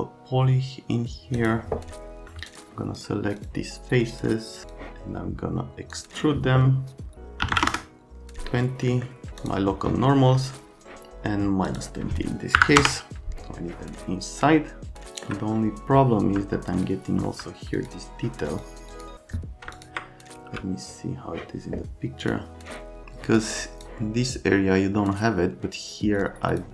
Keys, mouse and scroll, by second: 1.4 click, 2.5 ctrl+click, 3.0 ctrl+click, 3.4 ctrl+click, 4.0 ctrl+click, 4.5 ctrl+click, 4.6 click, 5.9 click, 7.4 KP_2, 7.5 KP_0, 7.6 KP_Enter, 8.9 right click, 9.4 click, 11.6 click, 12.5 KP_Subtract, 12.8 KP_Enter, 16.1 F3, 17.2 F3, 17.8 click, 18.5 click, 18.9 click, 19.7 ctrl+click, 20.4 x, 22.2 click, 23.5 click, 26.2 click.